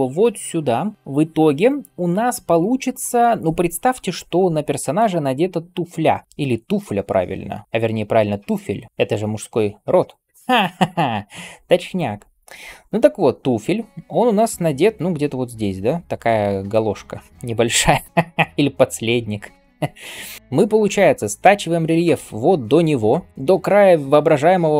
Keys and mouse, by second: 0.9-4.9 middle drag, 4.9 d, 5.4 d, 8.9-10.1 d, 9.9-17.6 drag, 9.9-17.6 middle drag, 9.9-17.6 right drag, 12.5 d, 13.0 d, 13.1 d, 14.4-19.5 typing.